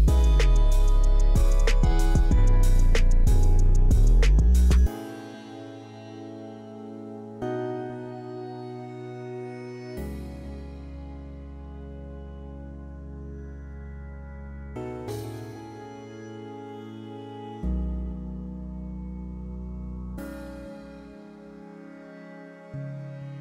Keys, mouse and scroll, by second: 4.7-5.2 scroll down 1, 5.2-11.1 scroll up 1, 11.1 middle click, 14.9 click, 18.0-19.1 scroll down 3, 19.7-20.1 scroll down 1, 20.5 scroll down 1, 21.1-23.3 scroll down 1.